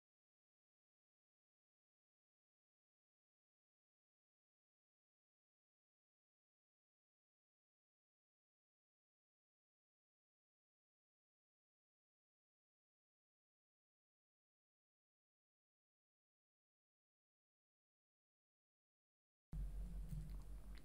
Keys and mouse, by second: 0.0 middle click, 0.6 g, 1.0 click, 1.4 click, 1.8 middle click, 2.0 middle click, 2.5 KP_1, 2.6 KP_3, 3.1 ctrl+middle click, 3.6 click, 4.1 click, 4.6 click, 5.1 click, 5.4 click, 5.6 shift+middle click, 5.9 click, 6.4 click, 7.1 click, 7.5 click, 7.8 click, 8.2 click, 8.4 click, 8.7 click, 9.1 click, 10.1 click, 10.5 click, 10.9 click, 11.1 click, 12.0 g, 12.3 click, 12.4 g, 13.1 click, 13.3 middle click, 14.1 KP_1, 14.3 middle click, 14.7 KP_3, 15.1 shift+middle click, 15.4 click, 15.5 click, 16.2 KP_1, 16.3 KP_3, 16.7 click, 17.3 click, 17.5 click, 17.8 shift+middle click, 18.5 g, 18.8 g, 19.6 shift+middle click.